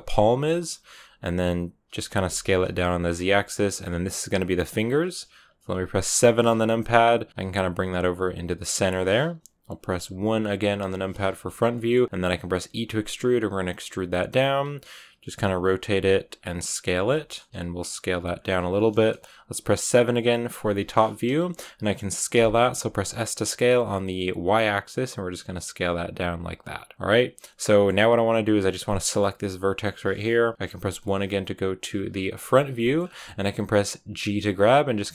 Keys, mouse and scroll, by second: 0.4 shift+middle click, 0.9 g, 1.9 s, 3.0 g, 6.1 KP_7, 7.3 g, 10.7 KP_1, 11.6 shift+middle click, 12.4 e, 15.2 g, 15.9 r, 16.9 g, 17.5 s, 18.0 g, 20.5 KP_7, 22.2 s, 26.0 g, 26.9-29.0 middle drag, 29.0-30.8 right drag, 30.8 KP_1, 32.7 shift+middle click, 32.9 shift+scroll up 3.